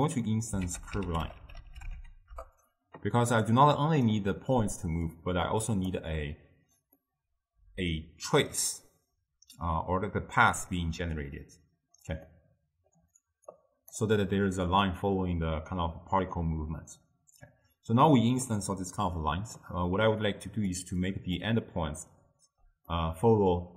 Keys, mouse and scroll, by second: 6.0 click, 7.1-20.4 middle drag, 20.4-23.0 drag, 23.0-23.7 middle drag.